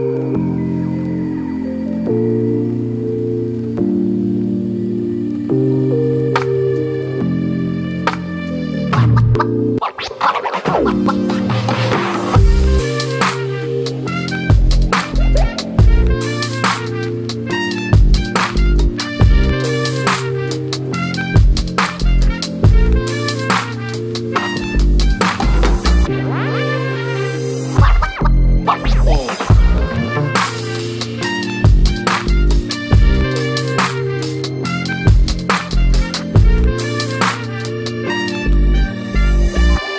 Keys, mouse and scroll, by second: 2.7 middle click, 3.0 click, 3.9 middle click, 4.2-5.8 ctrl+alt+drag, 5.8 scroll down 2, 6.0 click, 7.0 middle click, 7.3-9.6 drag, 9.6 shift+middle click, 9.9 click, 10.7 middle click, 11.7 scroll up 2, 11.9-15.3 drag, 15.3 middle click, 15.6 ctrl+alt+click, 16.2 shift+middle click, 16.7-18.8 drag, 18.8 scroll down 1, 18.8 shift+middle click, 19.2 scroll up 1, 19.4 x, 19.5 click, 19.9 scroll down 1, 20.0 middle click, 20.2 x, 20.2 click, 20.8 middle click, 21.1-22.7 drag, 22.7 middle click, 23.3-25.6 ctrl+alt+drag, 25.6 scroll down 2, 25.8 click, 26.1 middle click, 26.5 click, 27.0 middle click, 27.4 click, 28.1 middle click, 28.6-29.8 drag, 29.8 middle click, 30.1 scroll up 2, 30.2 ctrl+alt+click, 30.9 shift+middle click, 31.2-32.5 ctrl+alt+drag, 32.5 scroll down 2, 32.7 middle click, 33.3 ctrl+alt+click, 33.6 middle click, 33.7 scroll up 2, 33.9-36.8 drag, 36.8 middle click, 37.1 ctrl+alt+click, 37.6 scroll up 2, 37.8 x, 37.9-39.8 drag, 39.8 scroll down 1, 39.8 middle click.